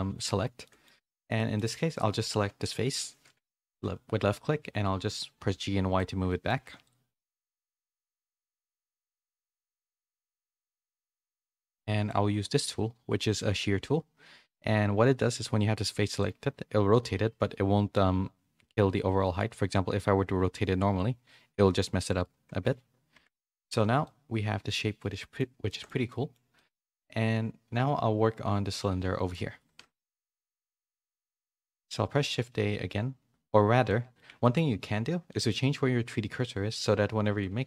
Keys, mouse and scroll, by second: 0.6 middle click, 1.0 shift+middle click, 1.3 middle click, 2.7 KP_3, 3.6 g, 6.2 middle click, 7.8 KP_3, 8.3 g, 11.0-12.1 drag, 15.5 click, 23.1 Tab, 23.6 a, 23.8 a, 24.0-25.2 middle drag, 25.6 shift+middle click, 26.1 middle click, 26.5 shift+middle click, 30.0 KP_3, 31.1 shift+middle click, 31.6 shift+a, 33.8 middle click, 34.4 shift+middle click, 35.2 middle click.